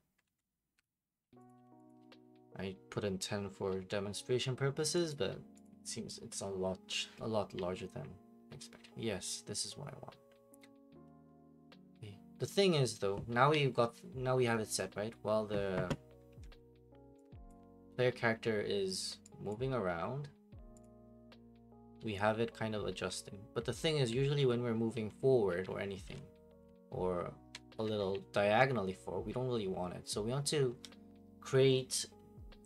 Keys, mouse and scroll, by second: 0.2 ctrl+a, 1.2 scroll down 1, 1.5 click, 1.5 scroll up 1, 1.9 click, 5.1 click, 5.6 click, 16.4 alt+Tab, 16.4 click, 17.5 click, 19.5 click, 20.8 click, 21.3-27.7 typing, 22.3 click.